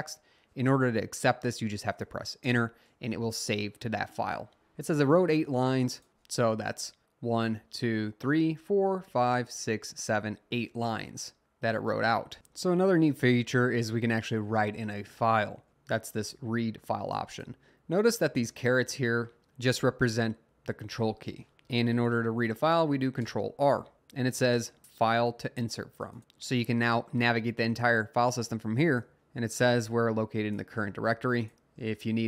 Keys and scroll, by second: 2.5 Return, 6.4 Up, 6.6 Up, 7.3 Down, 8.3 Down, 8.8 Down, 9.4 Down, 9.8 Down, 11.4 Up, 23.2 r.